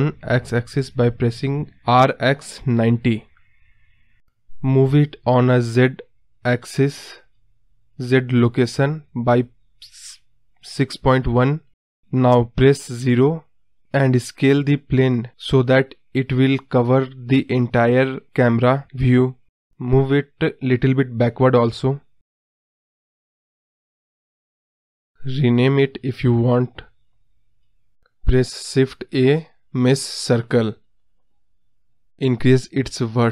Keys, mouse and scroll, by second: 0.0 shift+a, 1.6 middle click, 1.8 scroll down 1, 2.0 scroll up 2, 2.2-3.5 scroll down 1, 3.5-4.2 scroll down 1, 4.2-8.7 drag, 8.7 KP_0, 10.4 s, 12.4 scroll down 2, 12.5 middle click, 13.4-14.6 scroll down 4, 14.6 click, 15.4-16.6 drag, 16.6 KP_0, 17.2-18.1 scroll up 1, 18.1-19.6 scroll up 1, 20.4-27.1 drag, 27.2 click, 28.7-29.0 middle drag, 29.0 scroll down 2, 29.2-31.2 middle drag, 31.2 click, 31.6 scroll up 1, 31.7 middle click, 31.8 ctrl+z, 33.2 shift+a.